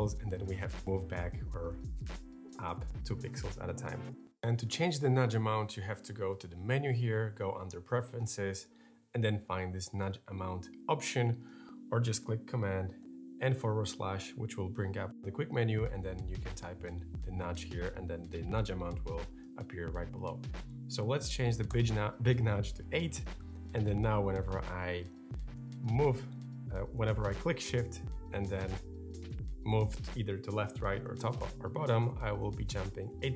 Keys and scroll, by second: 12.8 super+/, 15.9-16.9 typing, 20.8 8, 21.5 Return, 24.9 shift+Down, 26.1 shift+Up, 28.5 shift+Down, 29.0 shift+Up, 29.4 shift+Down, 31.2 shift+Up, 32.7 shift+Down.